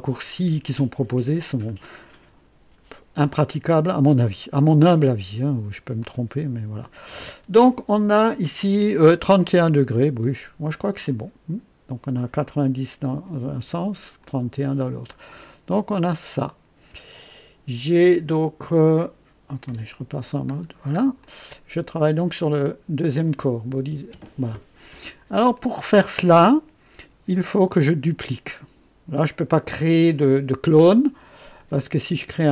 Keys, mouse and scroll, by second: 3.3-3.6 scroll up 1, 4.2-4.8 right drag, 6.0 click, 11.0 click, 14.1 click, 15.1-17.1 drag, 19.7 &, 20.5-20.9 scroll down 1, 20.9 scroll up 1, 21.2-22.0 drag, 25.5 click, 31.5 click.